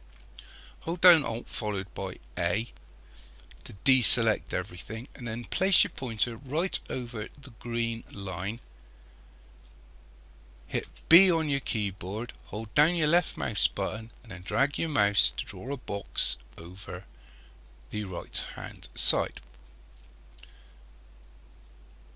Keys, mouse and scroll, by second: 2.2 alt+a, 10.9 b.